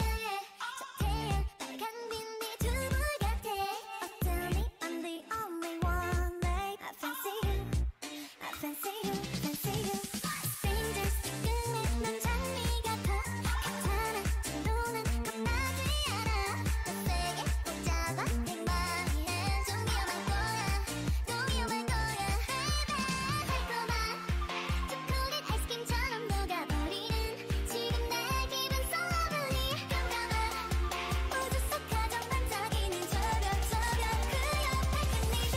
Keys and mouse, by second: 1.1 Tab, 2.2 ctrl+Tab, 3.1-5.3 drag, 4.1 x, 5.3 middle click, 6.4 ctrl+z, 6.7 a, 8.3-9.9 right drag, 9.9-11.8 drag, 10.5 g, 13.1 Tab, 14.3 Tab, 16.3-20.8 drag, 19.9 ctrl+z, 21.1 g, 22.4 g, 24.5 ctrl+Tab, 25.8 click, 27.7 c, 29.9 o, 30.6 g, 35.4 Tab.